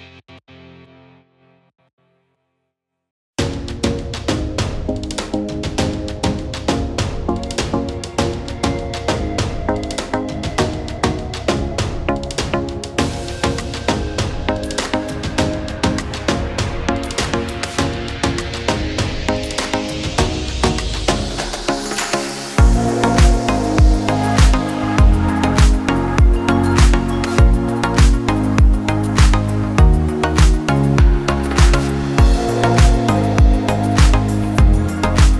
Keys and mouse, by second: 4.0 z, 5.1 z, 5.5 s, 6.5-9.7 drag, 9.7 middle click, 10.2-11.5 drag, 11.5 middle click, 11.8-13.5 drag, 12.7 s, 13.5-27.4 middle drag, 26.3 Tab, 27.4 click, 27.7 middle click, 28.2-29.9 drag, 28.5 BackSpace, 29.9 middle click, 30.4-32.1 drag, 30.8 BackSpace, 32.1 middle click, 32.6-35.3 drag, 33.0 BackSpace.